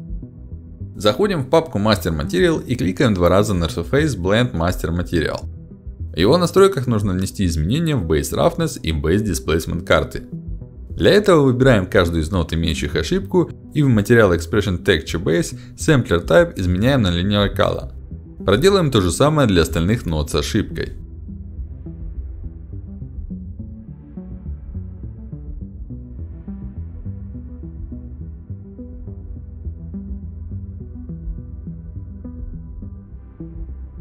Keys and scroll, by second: 3.8 ctrl+alt+d, 7.3 ctrl+alt+d, 17.0 ctrl+alt+d.